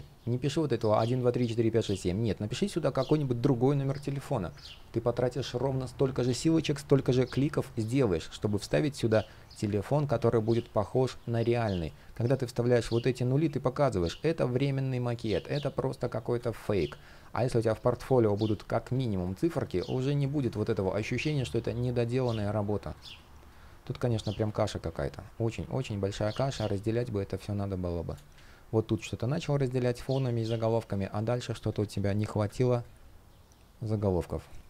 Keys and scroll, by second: 4.3 super+z, 9.9 super+z, 20.2 super+z, 26.2 super+z, 31.6 super+z.